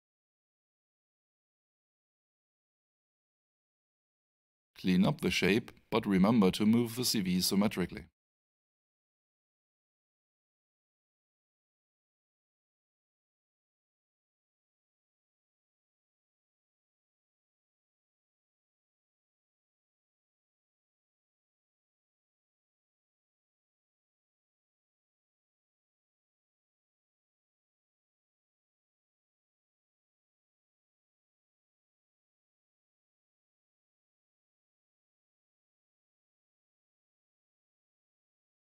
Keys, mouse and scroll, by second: 0.8 click, 2.3 alt+shift+click, 4.8 right click, 8.5 shift+click, 14.0 click, 20.4 right click, 24.0 click, 31.9 right click, 33.4 alt+shift+click.